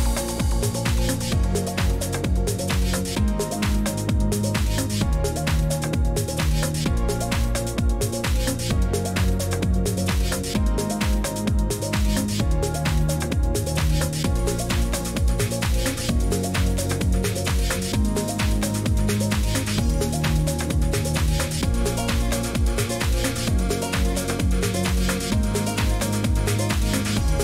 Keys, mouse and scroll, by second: 0.0-27.4 typing, 2.6-4.2 scroll, 4.2 click, 4.7 click, 5.1 click, 7.0 right click, 11.2 click, 13.0 click, 13.7 click, 14.4 click, 16.9 click, 17.2 click, 17.6 click, 21.1 click, 25.5 click.